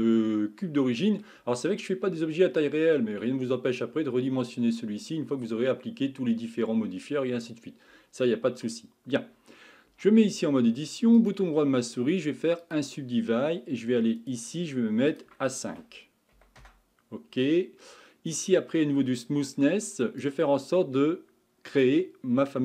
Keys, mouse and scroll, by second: 0.2-3.3 middle drag, 9.9 Tab, 11.2-14.2 right drag, 14.2-18.2 drag, 20.2-22.5 drag, 22.5-22.6 middle drag.